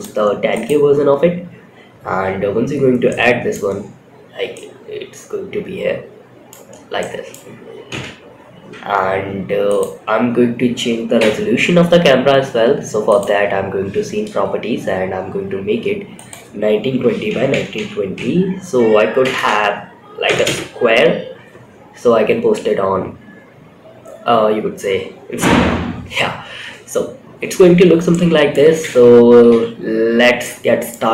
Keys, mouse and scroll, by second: 1.9 scroll down 2, 2.4-2.8 middle drag, 3.0 scroll down 2, 3.7 scroll down 1, 3.8-5.8 middle drag, 6.0 scroll up 1, 6.3-6.6 middle drag, 7.2 KP_0, 7.6-8.6 scroll up 3, 9.4 scroll down 1, 10.5 n, 12.4 click, 15.5-19.9 drag, 18.7 BackSpace, 21.2-21.7 scroll down 3, 21.7 scroll up 1, 22.5 scroll down 2, 23.3 scroll up 2, 26.3-26.7 scroll up 4, 27.4-27.8 shift+middle drag, 28.7 shift+middle click, 29.2 scroll down 2, 29.7-30.2 shift+middle drag, 30.5 scroll down 1.